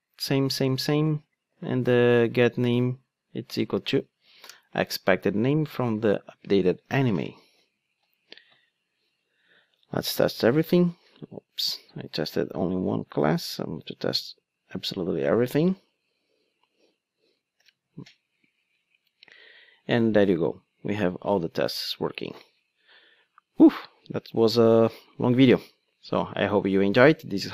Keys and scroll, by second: 4.6 Return, 17.6 ctrl+alt+o.